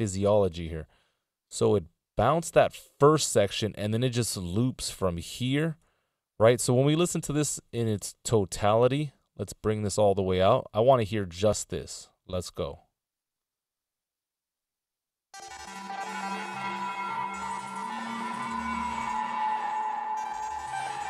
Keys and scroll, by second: 5.9 Delete.